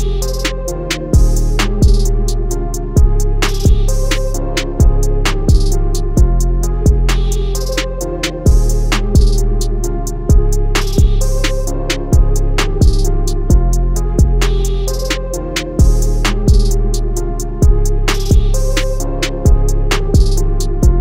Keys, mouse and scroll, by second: 0.5 scroll up 1, 1.7-2.5 alt+scroll down 4, 2.5 scroll up 1, 2.6 scroll down 1, 3.3 click, 6.1 right click, 6.6 click, 7.5-7.9 alt+scroll up 2, 8.4 click, 11.5 click, 12.6 scroll down 2, 13.6 click, 15.2 scroll up 1, 15.7 click, 19.8 Escape.